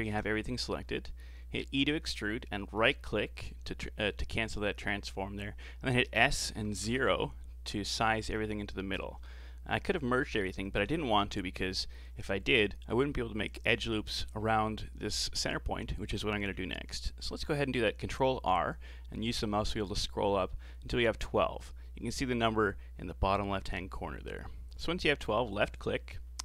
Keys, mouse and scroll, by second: 1.8 e, 6.2 s, 7.9-8.4 scroll up 4, 8.4-8.7 scroll down 4, 8.7-11.8 shift+middle drag, 17.3 ctrl+r.